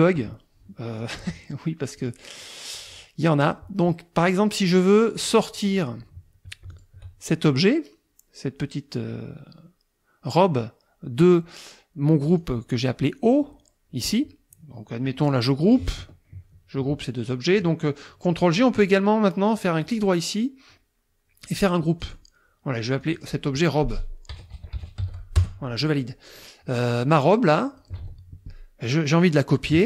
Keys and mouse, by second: 2.0 click, 2.9 click, 4.8 click, 5.2 click, 5.7 click, 6.7 shift+click, 12.3 click, 19.9 right click, 22.0 click, 23.0 click, 24.1-25.5 typing, 27.1 click, 28.0 ctrl+z.